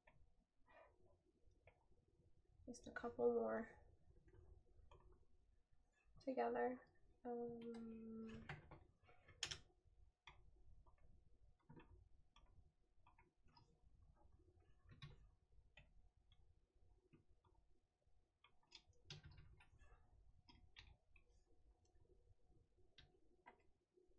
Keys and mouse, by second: 20.9 right click.